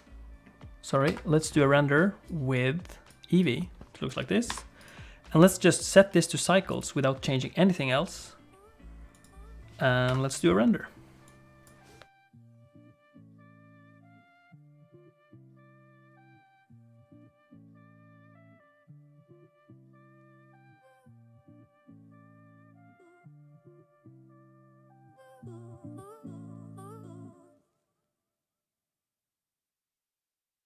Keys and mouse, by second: 4.8 click, 5.9-7.2 drag, 9.3 click, 10.4 F12.